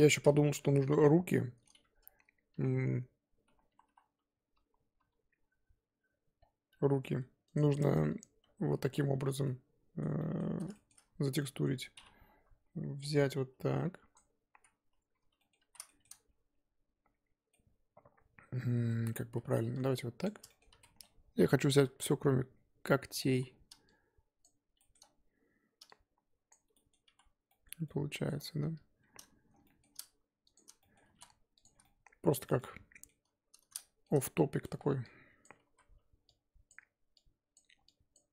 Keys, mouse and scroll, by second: 0.6 KP_7, 1.0-2.5 middle drag, 2.5-5.0 typing, 7.5 click, 7.9 Tab, 8.4-9.4 scroll up 1, 9.4 scroll down 1, 9.4-10.4 middle drag, 10.4 z, 10.7 shift+middle click, 11.0 scroll up 2, 11.4 middle click, 12.3 KP_1, 14.1 click, 14.6 z, 15.4 middle click, 15.6 z, 15.9-19.3 shift+middle drag, 19.3 z, 20.2 click, 20.5 shift+middle click, 20.7 z, 20.8 middle click, 21.7-22.0 ctrl+KP_Add, 23.4 z, 24.4 shift+click, 24.8 shift+middle click, 25.0-25.9 scroll up 2, 26.5 shift+click, 26.7 middle click, 27.1 z, 27.5 middle click, 28.4-28.7 scroll up 2, 29.6 shift+middle click, 30.5 alt+shift+click, 30.9 middle click, 31.1 ctrl+z, 31.6 alt+shift+click, 31.8-35.4 middle drag, 35.4 ctrl+click, 35.7 z, 36.7 ctrl+click, 37.5 ctrl+click.